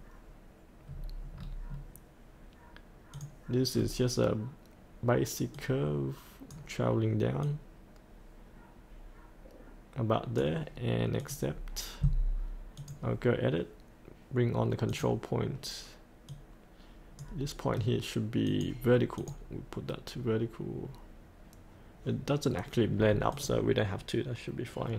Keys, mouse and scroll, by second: 0.9-3.1 scroll down 1, 3.1 click, 3.7-5.5 scroll down 1, 5.5-7.4 drag, 19.8-23.0 scroll down 1, 23.3-24.9 drag.